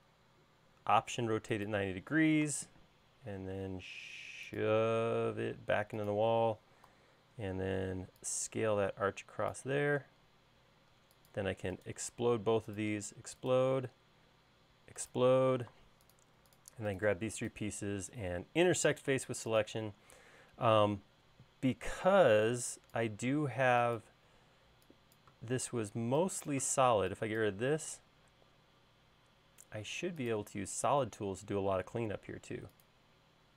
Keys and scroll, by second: 2.7 m, 7.4 s, 10.6 space, 21.9 e.